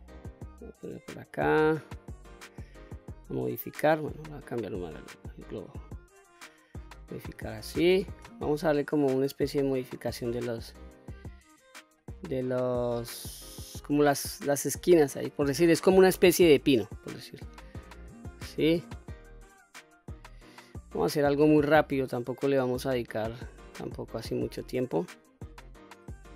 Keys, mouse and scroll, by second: 0.6 middle click, 1.8 click, 3.9-5.3 drag, 5.9 click, 6.9 middle click, 8.5 click, 9.5-10.5 drag, 11.1 click, 11.8-13.9 middle drag, 13.9 click, 15.1 middle click, 16.2 click, 16.8 click, 17.8-18.9 middle drag, 19.1 click, 19.8 click, 20.9 middle click, 21.9 click, 22.5 click, 23.4 middle click, 24.3 middle click, 25.5 middle click.